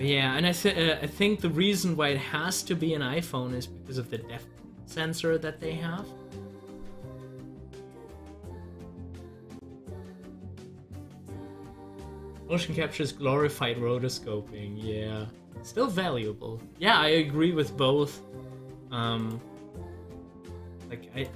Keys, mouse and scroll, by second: 8.9 scroll down 1, 16.6 scroll down 1, 19.8-20.4 scroll up 2.